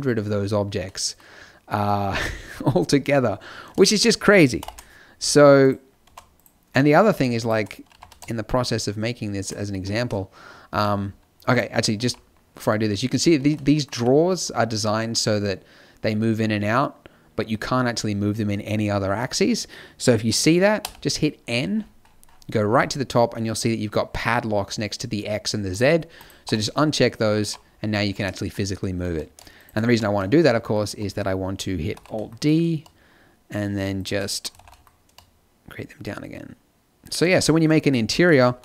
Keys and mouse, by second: 4.5 ctrl+l, 6.0 a, 7.9 g, 10.7 z, 11.9 g, 13.3 z, 13.9 g, 20.8 n, 25.7-28.1 drag, 26.4 n, 27.4 g, 28.5 click, 29.0 z, 29.5-31.9 drag, 29.8 z, 31.9 alt+d, 34.2 middle click, 34.5 alt+d, 36.0 middle click, 38.3 alt+d.